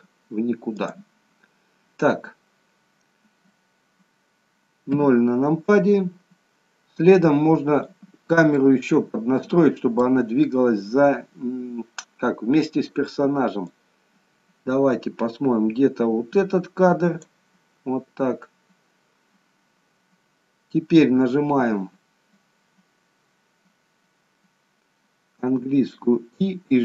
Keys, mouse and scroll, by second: 0.8 click, 5.0 KP_0, 7.8 click, 8.5 middle click, 13.7 click, 20.3-23.3 scroll down 1, 25.4 i.